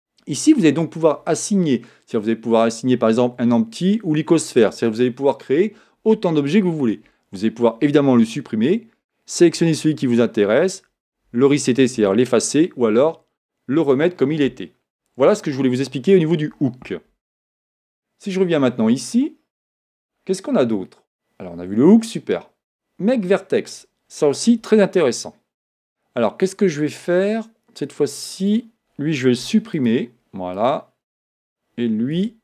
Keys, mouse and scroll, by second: 18.3-24.6 drag, 24.6 Tab, 28.4 click, 29.4 x, 30.5 click, 32.2 Tab.